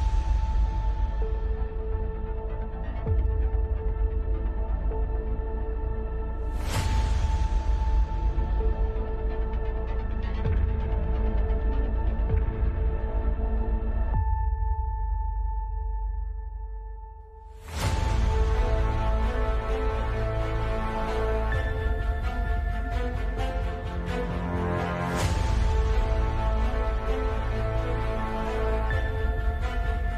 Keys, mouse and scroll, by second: 0.1 n, 1.8 z, 2.3 ctrl+KP_Subtract, 2.5 z, 3.8 ctrl+KP_Subtract, 4.4 g, 5.1-6.2 drag, 6.5 click, 7.6-8.3 right drag, 8.3 alt+c, 8.8 alt+c, 10.1 Tab, 10.5 Tab, 11.9 ctrl+KP_Subtract, 12.5 ctrl+z, 13.4 ctrl+KP_Subtract, 13.8 ctrl+z, 16.6-17.1 middle drag, 17.1 right drag, 17.3 middle drag, 17.8 g, 19.4-19.9 middle drag, 20.1 Tab, 21.3 middle click, 22.0 middle click, 22.6 middle click, 22.8 click, 23.0 right click, 23.2 KP_Decimal, 24.0 middle click, 24.4 middle click, 24.6 KP_5, 25.4 Tab, 25.6 Tab, 26.0 Tab, 26.5 space, 27.6 Tab, 28.0 space, 29.5 middle click.